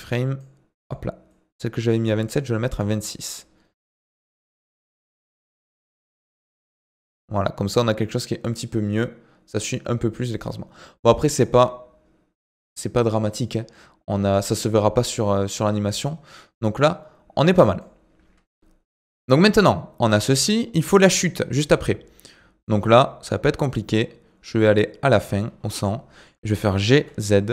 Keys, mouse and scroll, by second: 1.3-5.9 drag, 18.6 ctrl+alt+KP_8, 19.0-22.2 drag, 25.5 scroll down 1, 25.8 shift+middle click, 26.7 g.